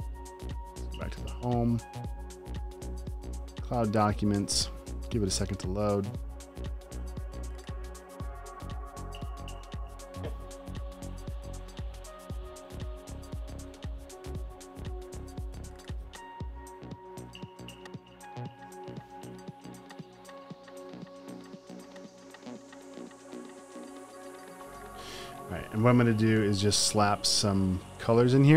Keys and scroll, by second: 26.3 m.